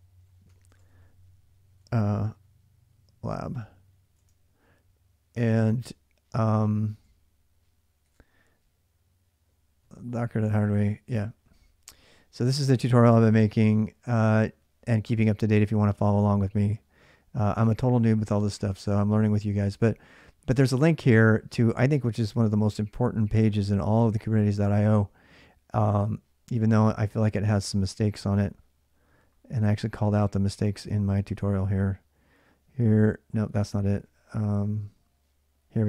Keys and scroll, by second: 0.0-2.1 typing, 3.9 typing, 7.6-8.4 typing.